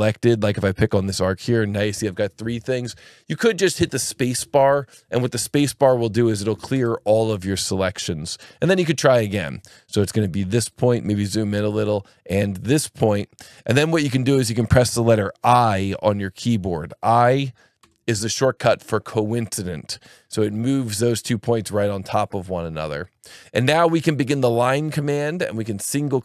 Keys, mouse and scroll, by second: 0.9 click, 6.7 space, 10.6 click, 12.9 click, 17.8 i, 25.1 click.